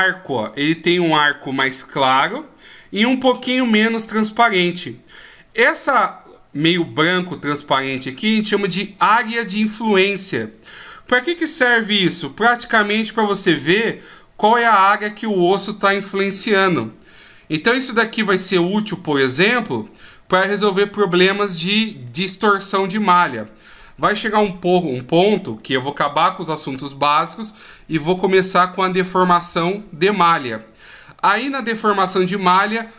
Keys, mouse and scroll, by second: 9.1 right click, 11.6 r, 22.1 middle click.